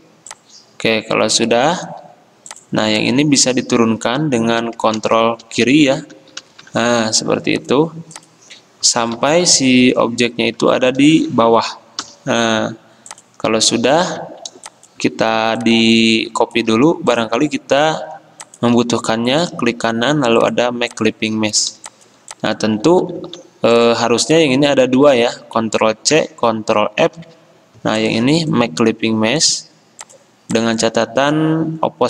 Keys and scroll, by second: 5.1 ctrl+[, 5.6 ctrl+[, 5.8 ctrl+[, 6.3 ctrl+[, 6.6 ctrl+[, 12.2 ctrl+], 23.0 ctrl+z, 23.3 ctrl+z, 25.1 ctrl+z, 26.2 ctrl+c, 27.2 ctrl+f.